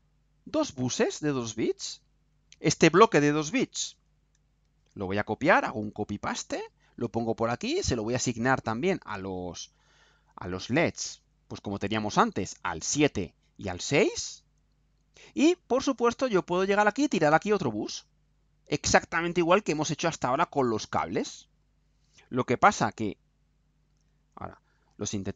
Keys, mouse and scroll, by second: 1.9-2.8 drag, 3.8 ctrl+c, 5.3-7.2 ctrl+drag, 7.8 click, 8.9 click, 11.3 scroll down 2, 12.4 click, 13.2 click, 14.8 click, 17.3-19.0 drag, 19.6-21.8 drag, 23.2-24.0 drag, 24.6 ctrl+u.